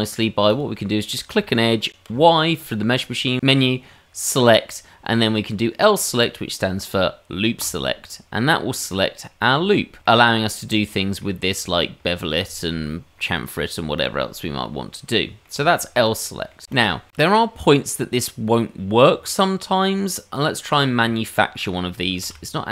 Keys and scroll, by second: 2.1 y, 19.2 Tab, 22.2 shift+a.